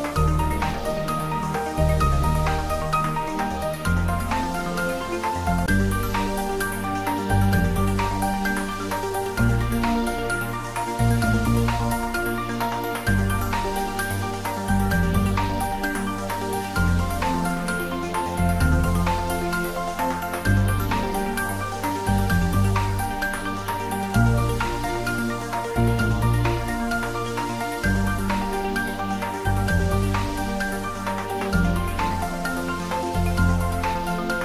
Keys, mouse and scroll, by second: 0.8-3.5 middle drag, 3.5-3.9 scroll up 1, 6.1 click, 10.6-11.6 scroll down 1, 11.6 click, 11.9-12.3 scroll down 1, 12.3 middle click, 13.0-13.3 scroll up 1, 13.9-14.2 scroll down 1, 14.2 middle click, 15.2-19.9 drag, 22.9 click, 29.1 click.